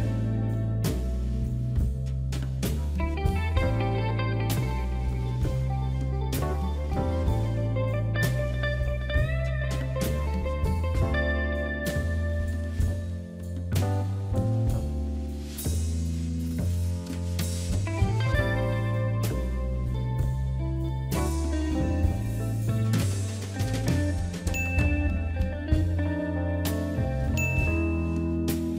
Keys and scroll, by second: 6.6 Delete.